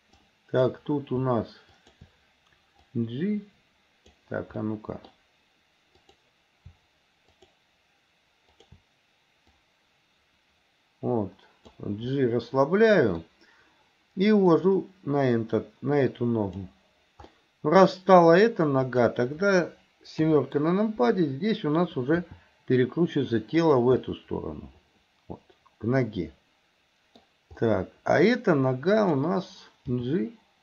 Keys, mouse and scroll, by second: 0.2-0.8 drag, 1.8 shift+click, 2.9 click, 3.3 click, 4.6 scroll up 1, 4.8 middle click, 6.0 click, 7.4 shift+click, 8.6 shift+click, 9.5-11.8 drag, 12.2-13.2 middle drag, 14.5 click, 14.7-16.7 drag, 17.4 middle click, 18.9 click, 20.2 KP_7, 22.2 r, 24.1-27.2 middle drag, 27.7 middle click, 29.0 click, 30.0 g.